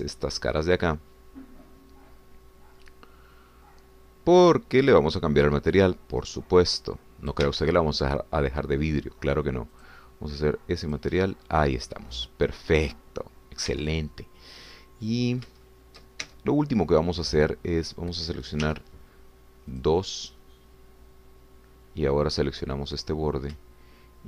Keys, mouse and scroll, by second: 0.2 shift+c, 0.7-8.5 shift+drag, 8.5 Escape, 10.8 click, 11.9 click, 14.8 Tab, 15.8 middle click, 16.6 shift+middle click, 17.3 shift+Tab, 19.7 2, 20.9 click, 21.2 click.